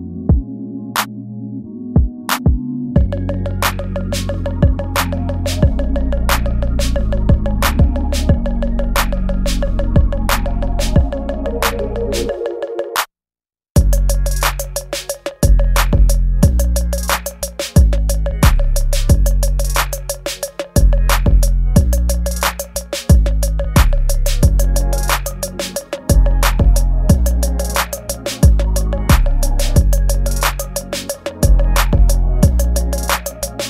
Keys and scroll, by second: 0.2 space, 3.4 ctrl+s, 6.6 ctrl+s, 7.2 ctrl+z, 7.4 space, 9.3 ctrl+z, 11.0 ctrl+z, 11.5 ctrl+z, 12.0 ctrl+z, 13.3 ctrl+z, 14.5 space, 15.4 ctrl+z, 23.7 space, 24.3 ctrl+s, 25.6 space, 26.7-29.3 typing, 28.8 ctrl+z, 29.5 ctrl+z, 29.9 ctrl+z, 30.3 ctrl+z, 30.6 ctrl+z, 31.1 space, 31.2 ctrl+z, 31.6 space, 32.2 space, 32.8 space.